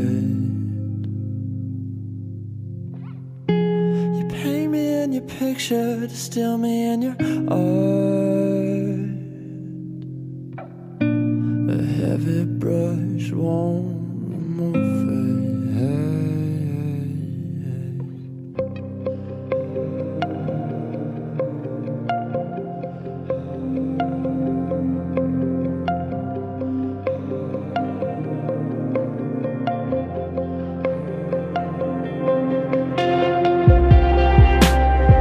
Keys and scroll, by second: 1.5 ctrl+z, 4.8 ctrl+z, 5.1 ctrl+s, 5.3 ctrl+z, 5.4 ctrl+v, 7.8 ctrl+z, 9.0 ctrl+z, 9.3 ctrl+z, 11.7 ctrl+space, 11.9 ctrl+z, 12.4 ctrl+z, 12.6 ctrl+z, 12.9 ctrl+z, 13.6 ctrl+z, 15.5 ctrl+s, 17.3 ctrl+z, 21.3 ctrl+z, 22.1 ctrl+z, 23.5 ctrl+z, 24.8 ctrl+z, 26.5 ctrl+z, 28.5 ctrl+z, 29.1 ctrl+z, 30.1 ctrl+z, 30.4 ctrl+z, 31.3 ctrl+z, 32.7 ctrl+z, 34.1 ctrl+z.